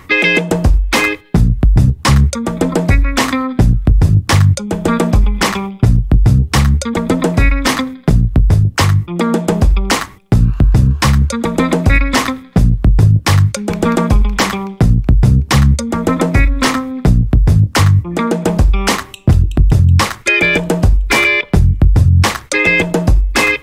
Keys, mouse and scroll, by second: 0.3 click, 0.6 scroll down 1, 2.0 scroll down 1, 2.3-2.7 scroll up 2, 3.0 scroll down 2, 4.1 click, 5.3-5.7 scroll down 2, 7.1 click, 8.1 click, 9.0 click, 10.7 i, 11.0 n, 11.7 shift+9, 12.8 t, 14.4-17.4 typing, 18.5 Return, 22.9 click.